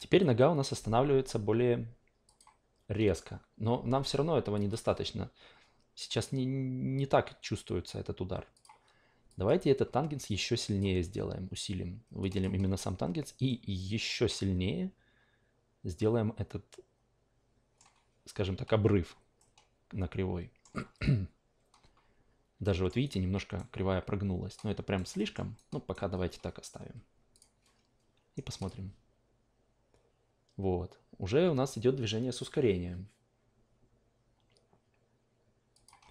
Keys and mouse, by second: 2.3 click, 4.5 click, 6.1 click, 8.5 click, 9.3 click, 10.3-10.8 drag, 12.2 drag, 13.4-17.8 middle drag, 19.4-20.6 middle drag, 22.6 alt+middle click, 23.0-25.1 alt+right drag, 25.1 alt+middle click, 25.5 alt+right click, 27.3 click, 28.5 click, 35.7 click.